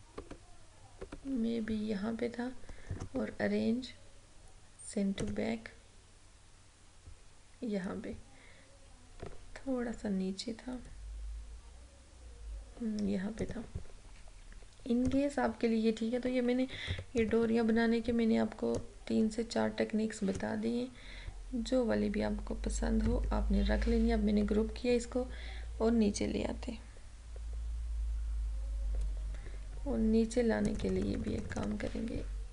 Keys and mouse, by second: 3.0 right click, 5.3 click, 9.9 Down, 13.5 click, 17.0 ctrl+-, 18.9-23.1 drag, 23.1 ctrl+g, 25.0 Down, 30.8 click.